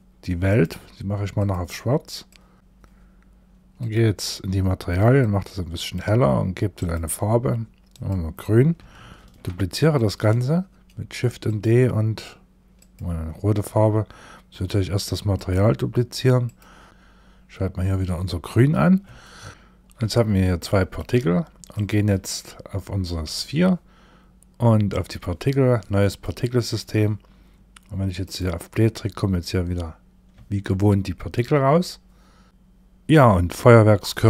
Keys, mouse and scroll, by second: 0.8 click, 3.2 click, 4.6 click, 6.2 click, 8.7 shift+d, 10.9 click, 14.8 click, 15.9 click, 18.6 shift+middle click, 19.6 shift+middle click, 21.1 click, 21.6 shift+middle click, 24.3 click, 25.5 click, 27.7 click, 29.2-29.8 scroll up 1, 30.2 shift+middle click, 31.2-31.6 scroll up 1.